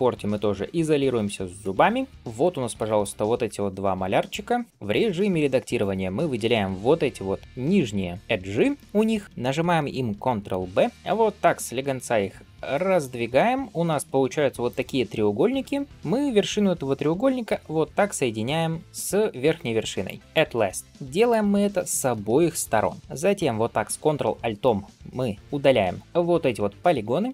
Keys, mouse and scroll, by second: 1.5 KP_Divide, 2.1 shift+middle click, 2.1 scroll down 1, 2.6 d, 2.8-4.2 drag, 4.2-4.6 d, 4.6 right click, 4.7 middle click, 5.6 click, 6.1 middle click, 6.7 shift+click, 7.7 shift+click, 8.6 middle click, 10.8 ctrl+b, 14.1 scroll up 2, 14.5 click, 15.8 shift+click, 17.3 m, 19.9 click, 20.2 m, 20.8 middle click, 21.1 click, 21.7 shift+click, 22.6 m, 23.0 ctrl+alt+3, 24.5 ctrl+alt+click, 26.0 middle click, 26.0 ctrl+alt+shift+click.